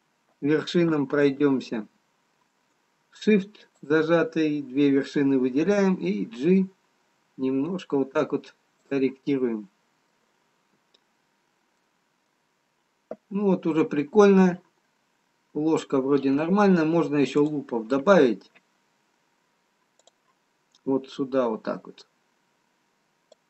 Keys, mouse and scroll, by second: 0.6 ctrl+z, 3.8 shift+click, 7.1 g, 9.7 middle click, 11.5-13.0 scroll down 1, 13.0 middle click, 13.0 scroll down 2, 15.4-16.6 scroll up 1, 20.1 click.